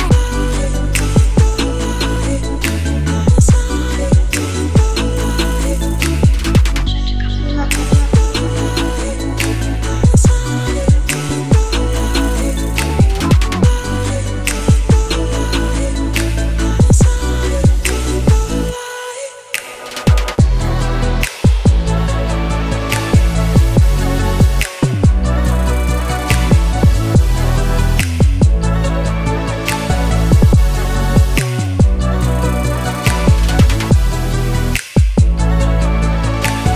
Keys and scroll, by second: 1.0 super+a, 1.7-7.0 typing, 8.0-9.3 typing, 22.6-24.2 typing, 24.9 Return.